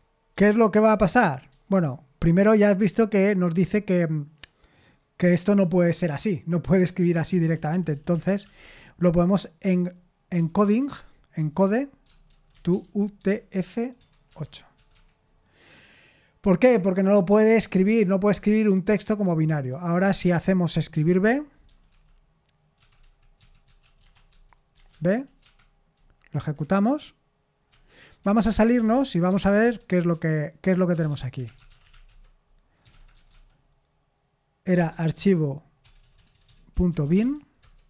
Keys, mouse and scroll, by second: 0.0-1.7 typing, 5.2-5.6 typing, 7.0-9.1 typing, 10.3 typing, 11.3 Tab, 12.0-14.7 typing, 14.9 Escape, 20.0-25.6 typing, 26.4 F5, 27.7 Escape, 28.1-37.7 typing.